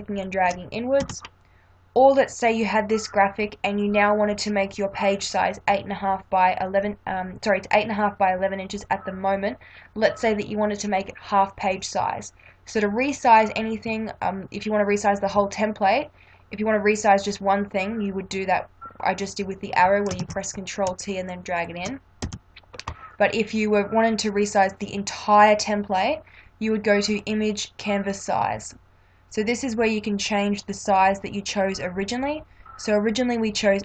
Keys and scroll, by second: 1.0 Return, 20.2 ctrl+t, 22.2 Return.